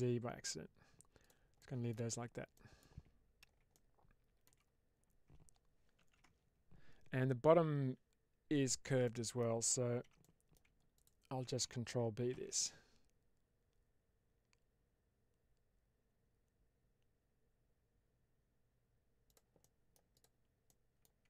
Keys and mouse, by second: 1.5 middle click, 2.4 middle click, 2.8 Tab, 3.6-4.3 middle drag, 4.3 Tab, 5.9 ctrl+r, 9.0 middle click, 9.9 2, 10.1 middle click, 10.8 click, 12.2 ctrl+b, 19.2 click, 19.5 middle click, 20.0 click, 20.5 middle click.